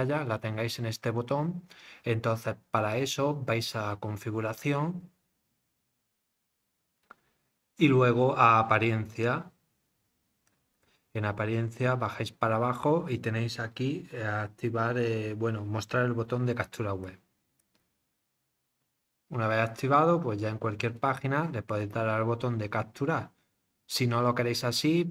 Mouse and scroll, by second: 2.9 click, 10.5 click, 11.0-12.0 scroll down 6, 12.4 scroll, 17.0 click, 17.6 click, 20.1 middle click, 20.8 click.